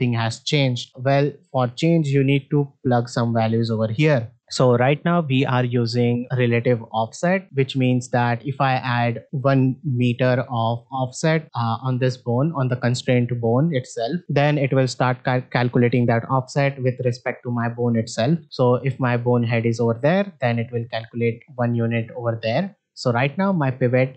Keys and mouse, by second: 9.8 click.